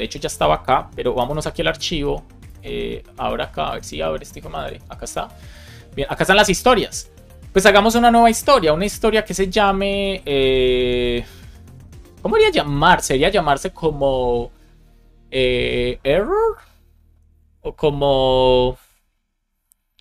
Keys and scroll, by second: 1.1 shift+super+e.